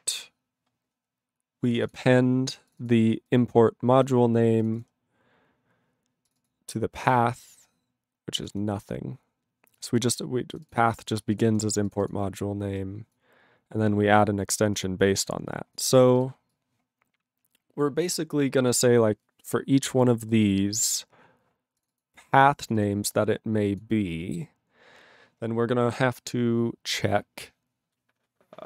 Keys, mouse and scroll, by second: 1.7 click, 1.7 click, 1.8 click, 1.9 double click, 2.7 click, 2.7 click, 2.7 click, 2.8 double click, 3.2 click, 4.0 click, 4.6 click, 5.3 double click, 6.2 click, 6.3 click, 6.4 click, 6.4 double click, 7.7-8.2 scroll up 3, 9.1 click, 9.7 click, 9.8 click, 9.9 click, 9.9 double click, 10.5 click, 10.7 double click, 11.0 click, 11.1 click, 11.3 click, 11.5 click, 11.5 click, 11.8 click, 11.9 click, 12.0 click, 12.0 double click, 12.7 click, 12.8 click, 12.9 click, 13.1 click, 13.9 click, 14.1 click, 14.8 click, 15.7 click, 16.1 click, 16.2 click, 16.5 click, 18.6 click, 20.0 click, 20.3 click, 20.5 click, 21.2-21.8 scroll down 1, 21.8 click, 21.8 click, 21.9 click, 22.0 double click, 22.2 click, 22.3 click, 22.4 click, 22.4 double click, 22.6 click, 22.7 click, 22.7 click, 22.8 double click, 23.1 scroll down 2, 23.7 click, 23.7 click, 24.9 scroll down 1, 25.4-28.4 scroll up 4.